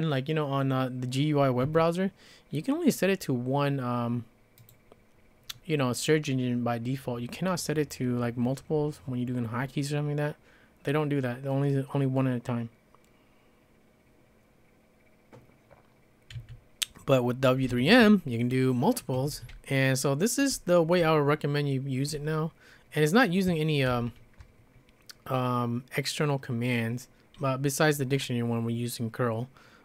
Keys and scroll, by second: 1.6 `, 16.3 `, 17.7 Escape, 17.9 Escape, 19.1 Escape, 19.3 Escape, 19.5-22.3 typing, 23.9 alt+l.